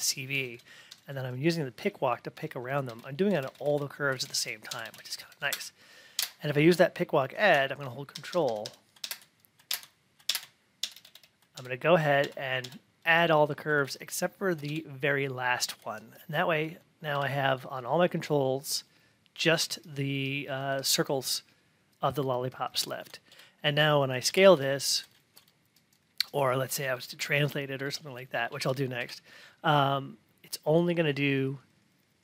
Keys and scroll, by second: 0.8 Right, 2.8 Left, 5.2 Right, 6.1 Left, 8.1 ctrl+Right, 8.9 Left, 10.8 ctrl+Left, 11.5 Left, 12.2 ctrl+Left.